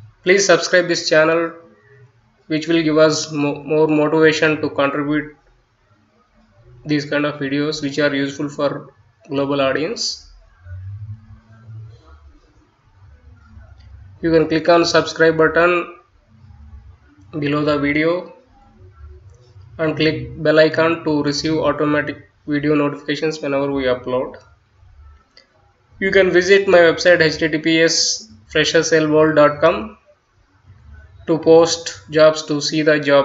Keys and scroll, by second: 1.3-6.8 typing, 8.4 space, 13.7 Delete, 28.1 F9.